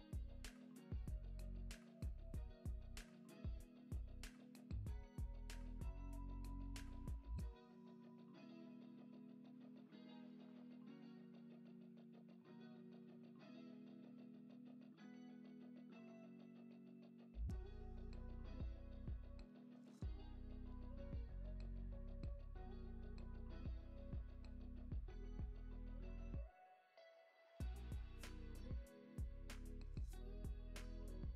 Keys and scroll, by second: 0.7-1.6 typing, 4.7-5.8 typing, 7.1 z, 10.2-12.1 typing, 13.6-15.6 typing, 19.7-21.2 typing, 23.6-25.4 typing, 25.7 super+s.